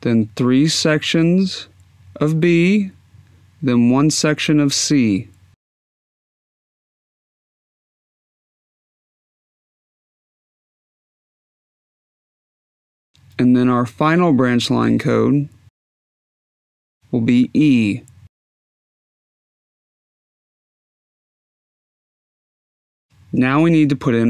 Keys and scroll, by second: 6.8 d, 7.5 Tab, 9.2 Tab, 9.9 b, 10.4 Tab, 10.8 c, 20.4 e.